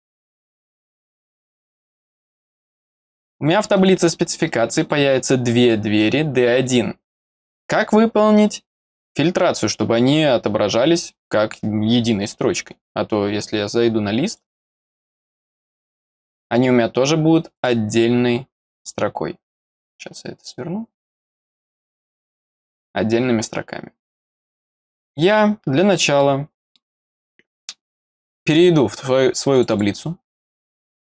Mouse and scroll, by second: 0.1 click, 1.2 click, 2.0 click, 3.7 click, 4.7 click, 6.6 click, 14.3 click, 14.4 click, 15.3 click, 17.5 click, 19.7 click, 20.5 click, 21.6 click, 25.5-26.1 scroll down 2, 26.1 middle click, 29.5 click, 29.7 click.